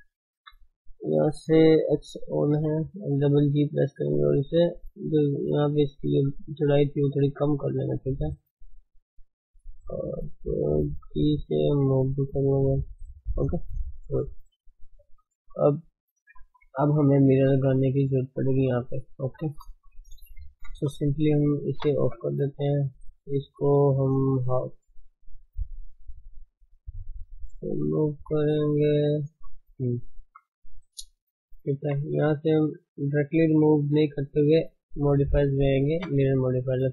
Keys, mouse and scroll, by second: 0.2 Left, 2.1 g, 5.3 shift+z, 7.5 shift+z, 8.1 Left, 9.0 Left, 9.8 Left, 10.0 shift+z, 10.9 g, 13.6-14.1 scroll down 4, 14.1 click, 21.7 click, 22.1 scroll down 5, 22.5 shift+middle click, 23.0-23.5 scroll up 1, 23.5-24.1 scroll up 1, 24.1 shift+z, 24.5-26.3 scroll down 3, 26.3 click, 26.5-26.9 scroll up 6, 27.3 shift+middle click, 27.6 shift+middle click, 27.9 scroll down 1, 28.0 shift+middle click, 28.2-28.8 scroll up 4, 28.8 shift+z, 29.3-29.8 scroll down 7, 29.8-31.6 shift+middle drag, 31.6 ctrl+space.